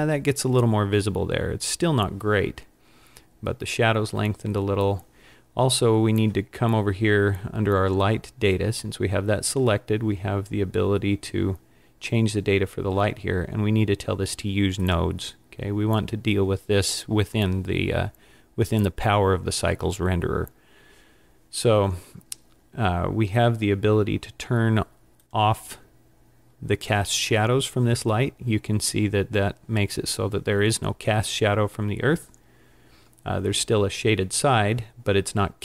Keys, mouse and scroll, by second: 14.9 click, 25.3 click.